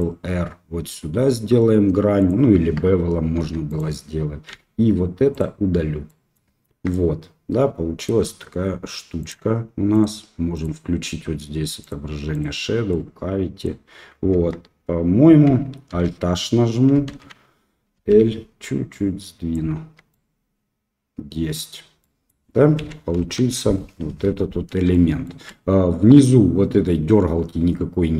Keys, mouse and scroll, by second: 3.3 3, 3.6 click, 4.5 x, 6.0 middle click, 6.6 Tab, 6.9-8.0 middle drag, 9.2 click, 9.9 click, 10.5-12.7 drag, 12.8-13.6 middle drag, 14.3 Tab, 15.9 alt+h, 17.9 l, 18.9 click, 19.7 Tab, 20.1-21.5 middle drag, 22.0 middle click, 22.8 Up, 23.1 KP_1, 24.9 shift+middle click.